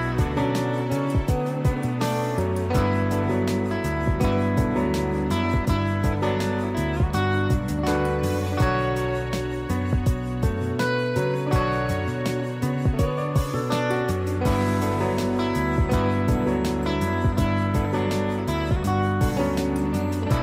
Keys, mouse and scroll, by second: 0.0-6.0 typing, 0.5 click, 1.4 click, 1.7 click, 2.0 click, 2.2 click, 2.7 click, 5.0 click, 6.4 ctrl+d, 6.6 ctrl+right click, 7.3 click, 7.8-9.0 typing, 8.0 click, 8.2 click, 8.7 ctrl+z, 9.5 ctrl+z, 10.7 typing, 10.9 click, 11.6 ctrl+z, 11.9-13.6 typing, 12.2 click, 13.1 click, 14.8 typing, 15.4 click.